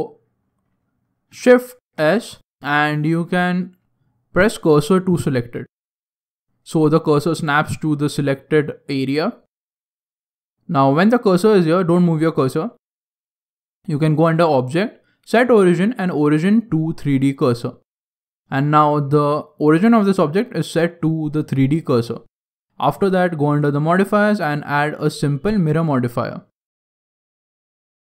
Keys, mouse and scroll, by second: 1.9 shift+s, 6.4 middle click, 7.7 scroll down 1, 7.8 scroll down 3, 7.9 scroll down 2, 7.9 middle click, 7.9-8.6 scroll down 1, 8.6 middle click, 9.7 Tab, 10.1 middle click, 12.3 middle click, 14.1 click, 18.0 scroll up 3, 18.2 scroll down 1, 18.5 shift+middle click, 18.9 middle click, 20.0 middle click, 20.6 shift+middle click, 23.6 click, 23.9 click.